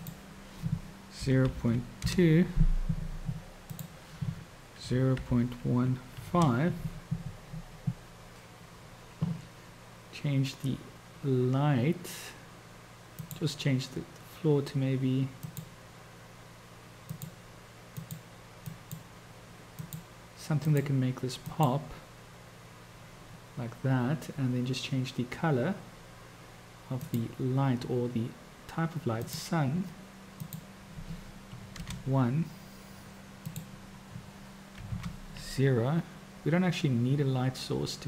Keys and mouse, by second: 0.2-7.9 drag, 13.2 click, 27.0-27.5 drag, 29.3 click, 30.7-32.3 drag, 33.9-35.4 drag.